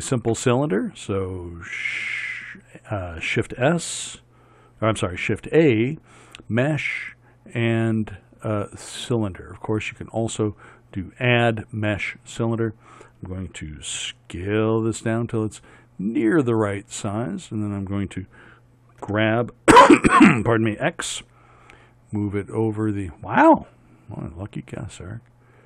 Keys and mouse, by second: 14.0 s, 19.0 g.